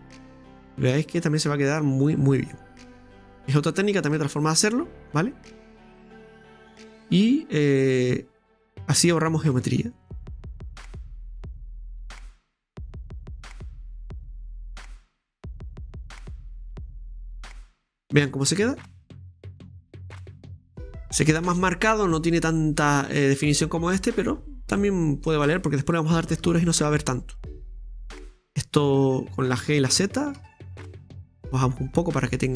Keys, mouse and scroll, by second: 0.5-1.7 drag, 1.8-4.3 middle drag, 4.3 right click, 4.7-5.8 middle drag, 7.9-10.1 middle drag, 10.1-12.1 drag, 12.1 right click, 13.1-16.1 drag, 17.2 scroll down 1, 17.4-18.5 middle drag, 18.5 Tab, 18.8-19.9 middle drag, 19.9 right click, 20.4 click, 21.1-22.3 scroll up 1, 22.3 scroll up 1, 22.3-23.8 scroll down 3, 23.8 scroll down 1, 23.9-24.3 scroll up 3, 24.8 scroll up 3, 24.8-26.4 shift+middle drag, 26.4 Tab, 27.8 right click, 28.1-29.6 middle drag, 29.6 g, 31.8-32.4 scroll down 1, 32.4-32.5 middle drag.